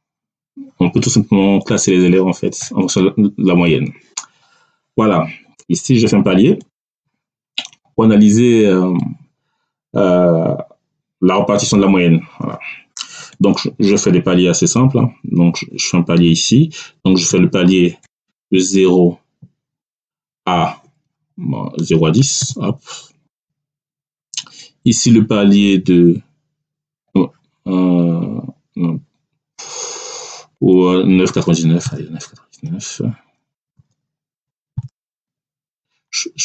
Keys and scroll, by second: 3.4 Down, 17.0 0, 17.9 BackSpace, 18.3 0, 19.7 Tab, 22.1 1, 22.3 0, 23.2 Return, 31.7 9, 33.6 ,, 34.6 9, 35.6 Return.